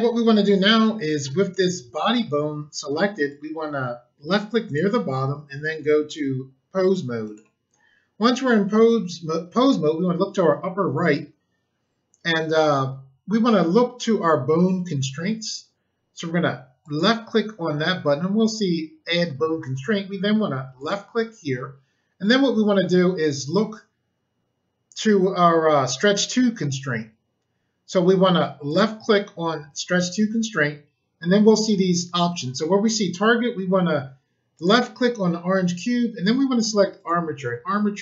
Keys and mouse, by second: 4.6 click, 7.2 click, 16.8 click, 20.7 click, 28.6 click, 34.5 click, 36.9 click.